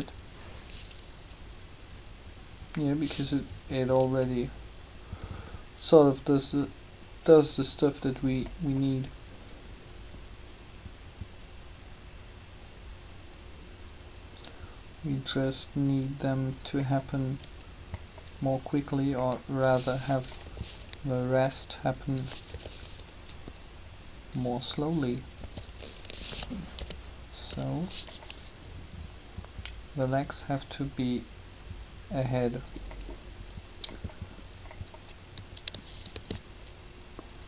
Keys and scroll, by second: 20.4 b, 22.5 b, 25.4 s, 26.7-27.5 typing, 36.1 shift+d.